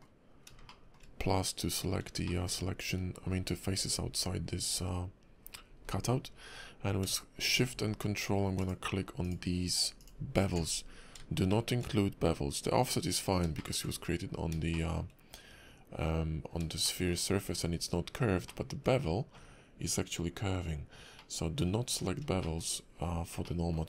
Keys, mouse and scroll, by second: 0.7 shift+middle click, 2.3 middle click, 2.5 scroll up 2, 3.2 scroll up 1, 3.8-4.7 scroll down 5, 4.7 scroll down 4, 5.4 scroll down 3, 5.6-6.2 scroll up 7, 8.7 alt+shift+click, 9.2 alt+shift+click, 10.6 scroll down 5, 11.5 shift+middle click, 13.2 scroll down 2, 13.5 shift+middle click, 14.7 shift+middle click, 16.8 shift+middle click, 17.2-18.5 scroll up 4, 18.5 middle click, 21.2 middle click, 21.7-22.3 scroll down 7, 22.4 shift+middle click, 22.7 scroll up 2, 23.4 middle click.